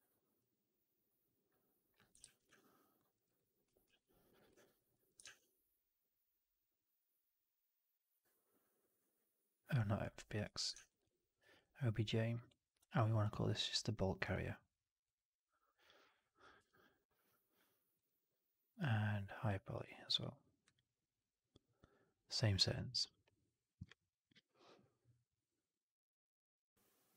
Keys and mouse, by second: 1.4 click, 2.2 ctrl+z, 3.0 alt+middle drag, 3.2 alt+right drag, 3.7 ctrl+s, 4.5 alt+drag, 4.8 alt+middle drag, 5.1 shift+Tab, 10.6 shift+Tab.